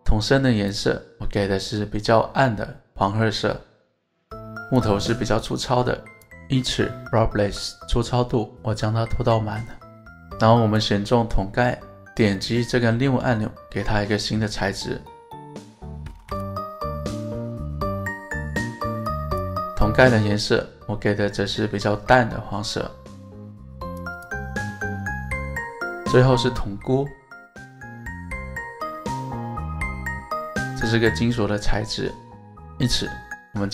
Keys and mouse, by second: 5.0-5.4 drag, 5.4-5.8 middle drag, 8.6 click, 9.2 click, 9.6-10.3 middle drag, 10.7 click, 14.4-16.7 drag, 16.0 o, 17.0-17.4 middle drag, 19.1 click, 19.9 click, 24.5-24.9 middle drag, 25.6-26.1 middle drag, 26.6 click, 28.4-29.5 shift+drag, 30.8 click.